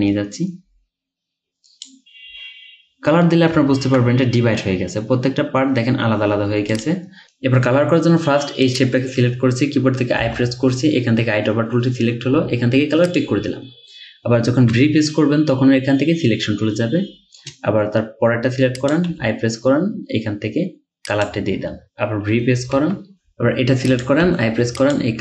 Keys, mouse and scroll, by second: 3.8-4.2 ctrl+scroll down 1, 10.2 typing, 14.5-15.2 typing, 19.1 typing, 22.6-24.3 typing.